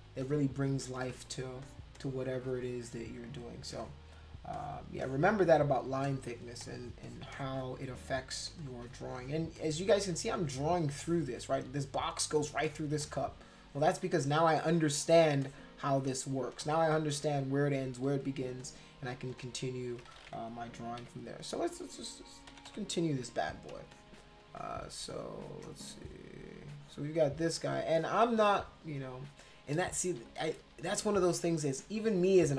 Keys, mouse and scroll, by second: 0.2 click, 1.0 space, 1.1 click, 1.6 click, 2.0 click, 2.6 click, 3.7 space, 3.8 click, 4.5 click, 5.0 click, 5.4 click, 6.0 click, 6.6 click, 7.0 click, 7.3 click, 8.5 space, 8.6 click, 9.6 click, 10.4 click, 11.0 click, 12.6 space, 12.7 click, 13.0 click, 14.1-15.2 drag, 15.4 click, 16.5 space, 16.6 click, 18.5 space, 18.6 click, 19.3 space, 19.4 click, 21.0 b, 22.5 [, 22.7 [, 23.8 space, 23.9 click, 24.6 click, 25.1 click, 25.9 click, 26.8 click, 27.3 click, 27.9 click, 28.3 click, 28.6 click, 29.9 ctrl+z, 30.1 ctrl+z, 30.3 ctrl+z, 30.5 ctrl+z, 30.6 ctrl+z, 30.9 ctrl+z, 31.2 ctrl+z.